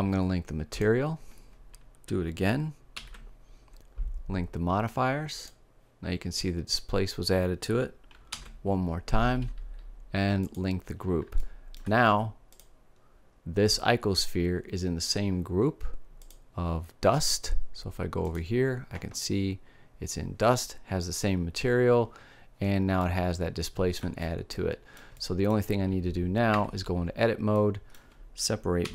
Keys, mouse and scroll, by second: 2.8 ctrl+l, 8.2 ctrl+l, 11.3 click, 12.4-14.2 drag, 16.1-17.9 drag, 18.1-20.1 drag, 22.9-24.8 middle drag, 26.4 Tab, 27.0 middle click, 28.8 p.